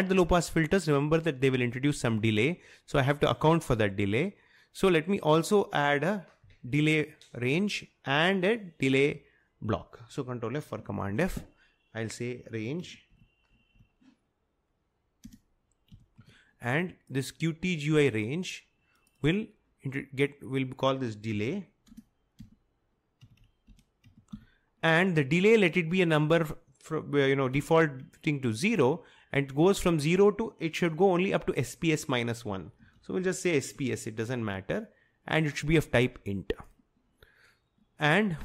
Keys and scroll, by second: 11.1 ctrl+f, 12.7-14.2 typing, 15.3-16.7 typing, 21.4 typing, 23.1-24.5 typing, 27.6 0, 32.7-33.7 typing.